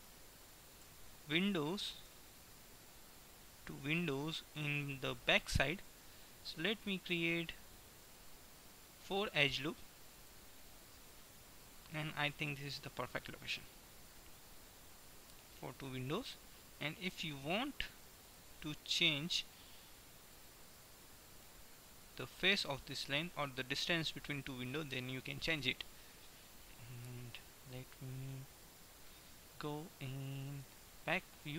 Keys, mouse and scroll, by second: 0.6 click, 0.9 a, 4.6 ctrl+r, 12.7-14.4 middle drag, 14.9-17.2 middle drag, 18.2 right click, 19.1 right click, 19.9-21.2 middle drag, 21.9-24.7 middle drag, 25.2-27.7 middle drag, 28.7 KP_1, 30.7 shift+KP_1.